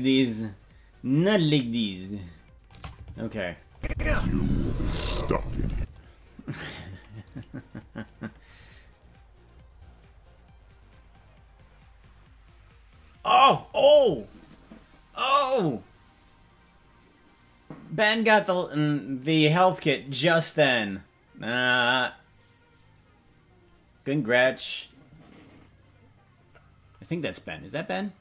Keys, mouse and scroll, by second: 3.7 click, 3.9 space, 5.7 space.